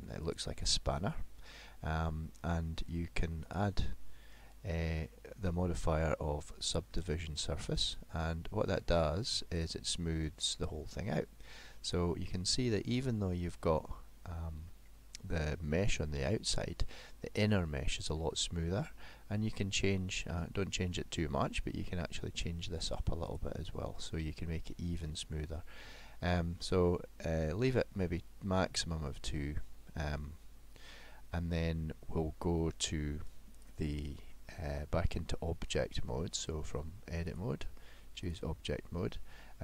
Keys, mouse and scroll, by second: 0.2 click, 3.6 click, 11.7 middle click, 14.7-15.1 scroll up 2, 17.9 middle click, 23.3 click, 25.5 middle click, 31.8 middle click, 34.3 middle click, 37.3 click, 39.4 middle click.